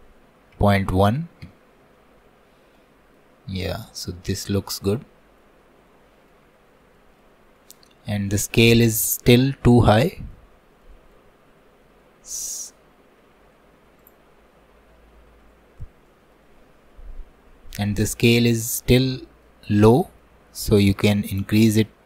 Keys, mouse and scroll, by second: 2.4-2.8 scroll down 6, 2.8 middle click, 3.7 scroll up 2, 4.1-6.5 shift+middle drag, 6.5 scroll up 2, 7.0-10.6 shift+middle drag, 10.6 scroll up 2, 10.9 middle click, 11.4-12.3 scroll up 2, 12.3 scroll up 1, 12.4-15.3 drag, 15.5-16.1 scroll down 6, 16.1 middle click, 16.9-17.9 scroll down 1, 17.9 middle click, 18.8-19.2 scroll up 1, 19.2-21.3 shift+middle drag, 21.3-22.0 drag.